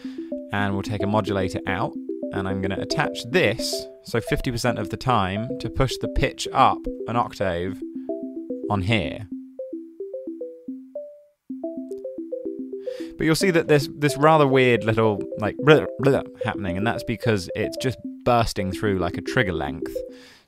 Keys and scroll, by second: 0.0-0.5 typing, 6.9-8.4 typing.